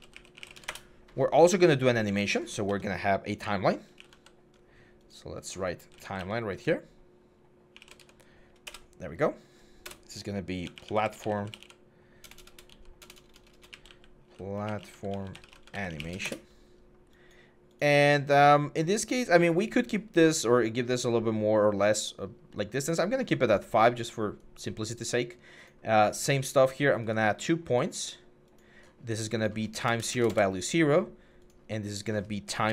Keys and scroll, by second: 0.0-0.7 typing, 2.5 Tab, 2.5 typing, 3.7 typing, 5.6-6.0 typing, 7.3-8.0 typing, 8.5 Return, 9.6-16.1 typing, 16.1 Return, 29.7 0, 29.8 Tab, 29.9 0, 30.1 Return, 32.5 5.